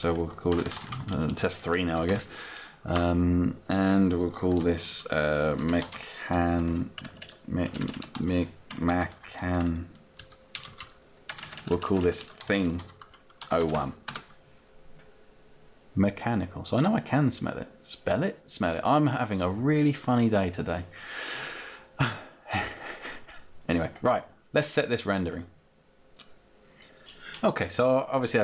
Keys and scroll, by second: 2.1 Return, 6.7 BackSpace, 13.8 Return.